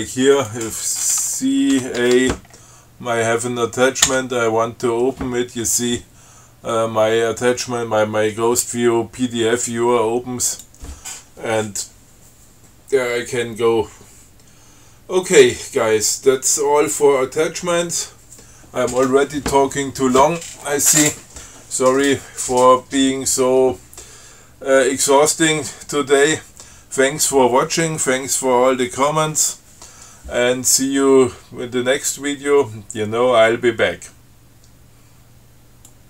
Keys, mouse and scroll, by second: 0.6 click, 2.0 ctrl+c, 2.2 ctrl+a, 4.3 o, 10.7 click.